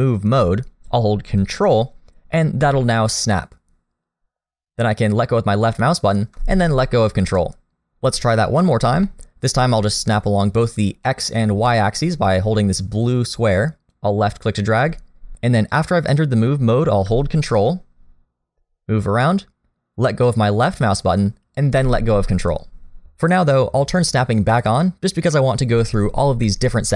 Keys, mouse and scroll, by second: 9.0 middle click, 11.0 middle click, 13.9 click, 24.5 click.